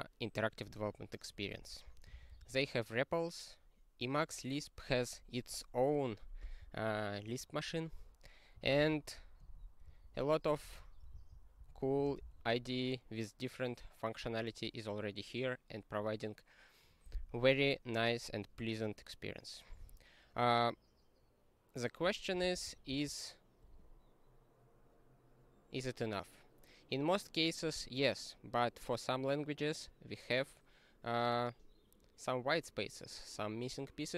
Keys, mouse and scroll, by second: 0.6 click, 0.7 click, 1.7 ctrl+b, 2.1 ctrl+d, 8.4-11.7 typing, 11.8 ctrl+s, 12.3 ctrl+g, 22.4 ctrl+n, 22.6 ctrl+a, 22.9 ctrl+space.